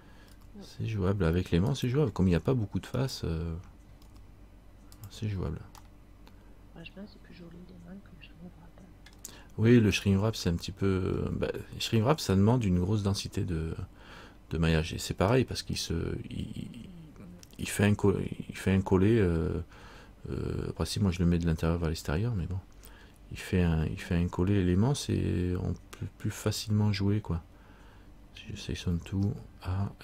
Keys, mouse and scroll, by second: 0.5 g, 3.1 right click, 4.2 g, 6.0 middle click, 10.1 right click, 11.3-12.4 scroll up 1, 12.4 scroll up 3, 15.4 scroll up 1, 15.5 middle click, 17.9 shift+middle click, 18.8-21.1 scroll down 1, 26.6 click, 29.1 a.